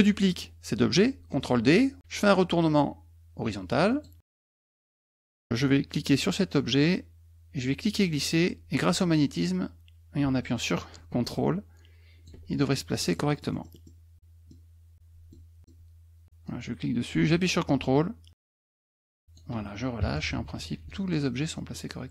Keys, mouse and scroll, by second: 3.9 click, 7.7-12.2 drag, 12.7 middle click, 13.0 middle click, 13.3 middle click, 13.7 middle click, 14.2 middle click, 15.0 middle click, 16.5-19.3 drag, 21.7 middle click.